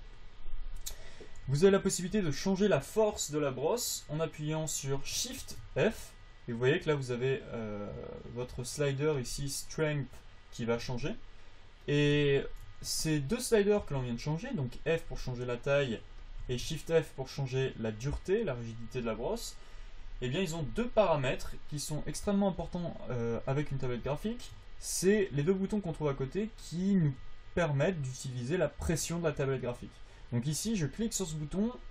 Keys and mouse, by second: 1.1-5.8 drag, 1.8 f, 5.8 shift+f, 11.2 shift+f, 13.2 f, 14.2 f, 15.6-17.3 drag, 16.3 f, 16.8 shift+f, 18.4 click, 19.6 f, 20.2 f.